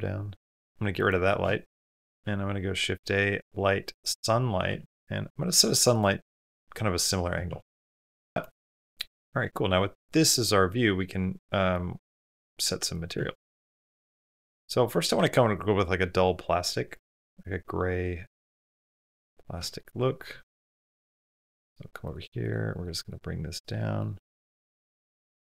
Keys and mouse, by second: 0.6 x, 1.9 shift+a, 4.7 r, 7.3 r, 9.8 click, 10.3 click, 11.5-13.2 drag, 13.2-14.5 shift+middle drag, 17.0-18.4 drag, 20.9 click, 22.8-25.4 drag.